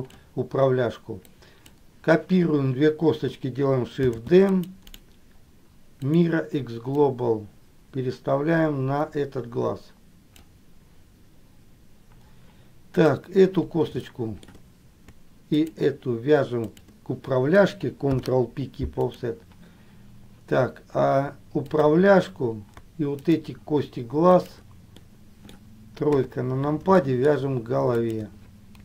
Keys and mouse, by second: 1.6 click, 4.4 shift+d, 5.1-6.5 right drag, 7.2-10.7 drag, 14.2 shift+middle click, 15.7 shift+click, 16.8 shift+click, 18.2 ctrl+p, 21.7 click, 23.3 shift+click, 24.5 shift+click, 25.1 middle click, 26.3 KP_3, 27.1 shift+middle click, 28.1 shift+click.